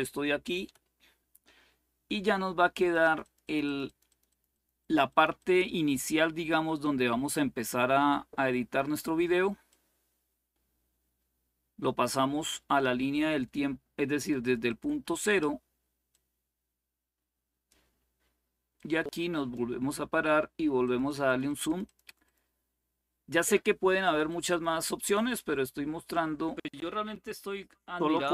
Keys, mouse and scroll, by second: 0.4 Delete, 2.5 click, 4.1 click, 4.3 click, 4.6 click, 9.4-12.6 drag, 13.9 click, 14.2 click, 15.8-17.5 drag, 18.5-19.9 drag, 20.6-22.1 drag, 23.8 click, 25.7 click.